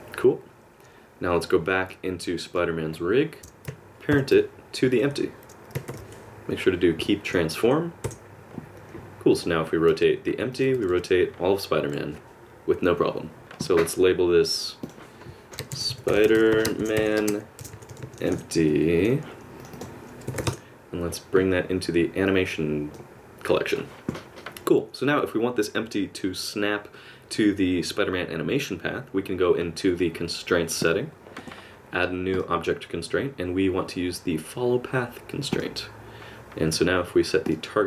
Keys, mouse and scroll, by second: 2.5 click, 3.4 shift+click, 4.1 ctrl+p, 9.4 click, 9.9 r, 10.8 r, 14.8 click, 19.6 click, 30.8 click, 37.5 click.